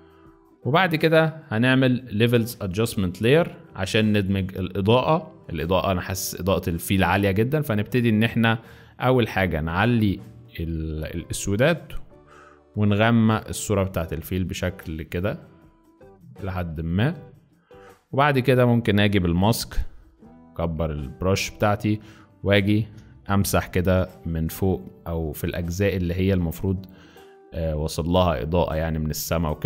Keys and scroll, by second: 0.0 z, 19.4 b, 22.9 x, 23.5 ], 23.6 ], 23.8 ].